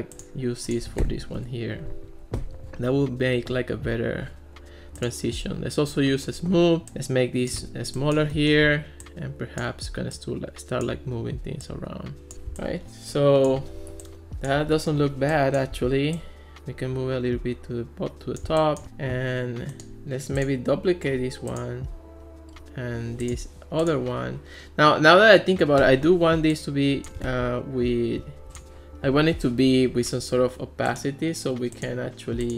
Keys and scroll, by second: 1.1 super+v, 1.4 Return.